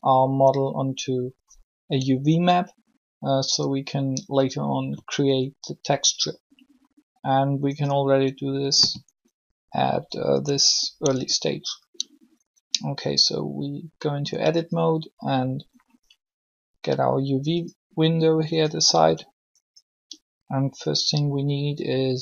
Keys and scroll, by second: 11.1 Tab.